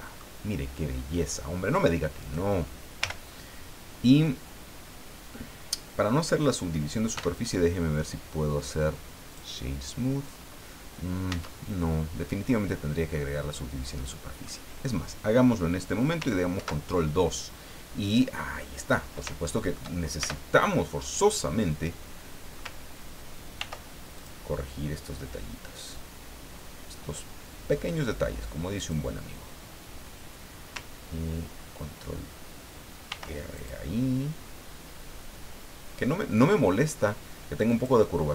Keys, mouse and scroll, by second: 2.2 right click, 3.0 l, 7.1 w, 9.3 click, 11.3 Tab, 12.1 scroll down 2, 12.5-14.6 middle drag, 16.5 ctrl+2, 18.5 scroll up 2, 19.3 shift+middle click, 20.2 shift+Tab, 23.6 ctrl+r, 24.1 ctrl+click, 28.8 click, 33.1 ctrl+r, 33.6 ctrl+click, 37.7 click.